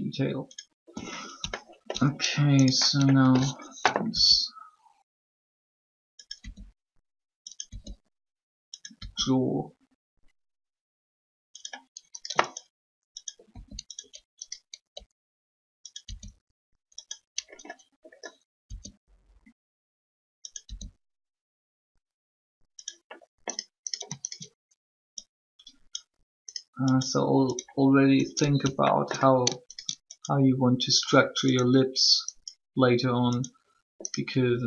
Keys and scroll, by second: 4.1 alt+e, 6.4 e, 8.9 e, 13.5 shift+r, 14.8 e, 18.6 e, 20.6 e.